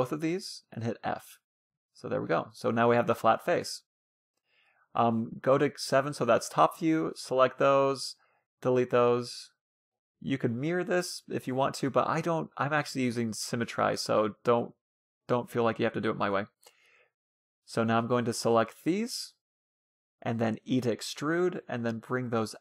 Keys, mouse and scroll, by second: 0.1-1.6 right drag, 0.4 f, 0.7 a, 0.9 middle click, 1.6 a, 2.3-5.2 middle drag, 6.0 a, 6.3 b, 7.6 Delete, 8.4-9.4 middle drag, 12.1 a, 12.7-14.2 drag, 15.1 middle click, 16.6 a, 17.3-18.9 middle drag, 17.5 c, 19.8 e.